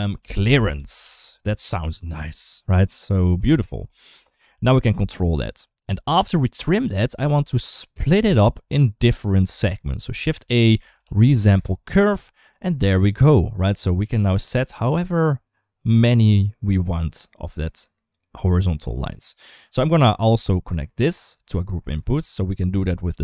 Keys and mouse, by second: 2.0 n, 3.4 shift+middle click, 4.9 ctrl+s, 4.9 g, 5.9 middle click, 6.9 click, 8.2 ctrl+s, 9.3 ctrl+s, 10.0 shift+a, 13.5-17.9 drag, 19.1 middle click, 20.5 click, 20.8-21.6 drag, 23.1 drag.